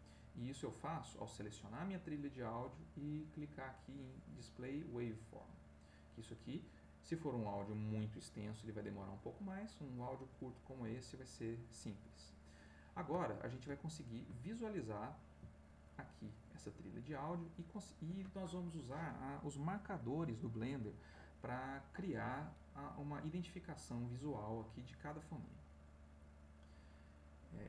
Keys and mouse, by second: 1.2 click, 4.3 click, 11.6-12.7 drag, 12.7 middle click, 13.9 ctrl+middle click, 14.4-15.5 ctrl+middle drag, 16.2-17.8 drag.